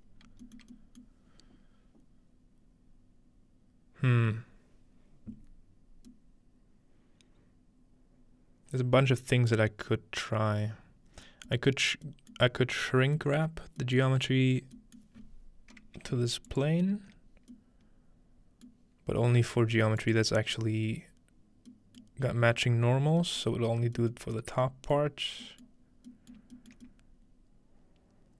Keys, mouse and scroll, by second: 0.0-5.9 scroll up 1, 0.6-1.0 shift+middle drag, 1.1-5.9 shift+middle drag, 11.8 middle click, 11.8-12.5 scroll down 1, 12.5-13.2 middle drag, 13.5-13.8 middle drag, 14.0-14.7 middle drag, 15.0-16.5 middle drag, 15.2-16.1 scroll up 2, 16.1-17.2 shift+scroll up 1, 16.5-18.2 alt+shift+drag, 18.7-20.1 middle drag, 20.0-21.7 alt+shift+drag, 22.0 middle click, 22.5 middle click, 23.4-24.0 middle drag, 25.3-26.1 middle drag, 26.4 shift+middle click, 26.8 shift+middle click.